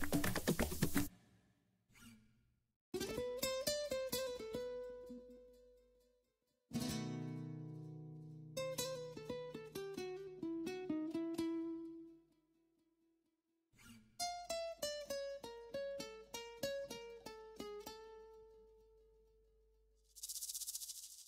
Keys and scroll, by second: 12.8 space, 19.5 ctrl+a.